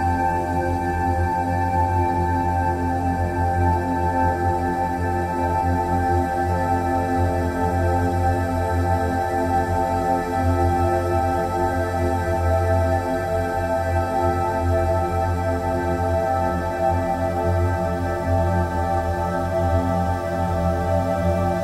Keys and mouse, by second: 1.0 click, 6.8 click, 7.8-9.7 drag, 12.3-13.4 drag, 15.1-16.6 drag, 18.3-20.0 drag, 21.0-21.6 drag.